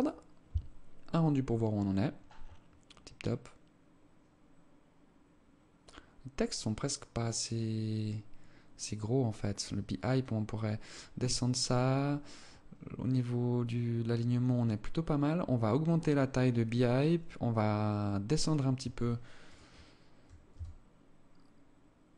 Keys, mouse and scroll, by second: 18.2 Escape, 18.8 right click, 19.1-19.4 scroll down 3, 19.8 scroll up 1, 19.9 s, 22.0 g.